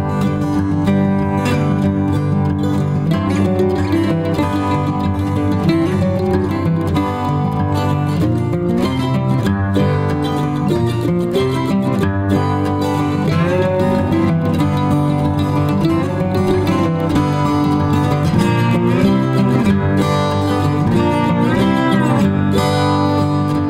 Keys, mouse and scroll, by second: 1.9 ctrl+click, 2.2 shift+click, 2.8 b, 3.8 space, 4.9 shift+click, 5.0 ctrl+alt+click, 5.1 shift+click, 5.5 b, 5.7 alt+click, 6.8 alt+shift+click, 7.1 r, 7.5 ctrl+z, 17.3 alt+click, 20.0 alt+click, 20.5 ctrl+alt+click, 21.1 alt+click.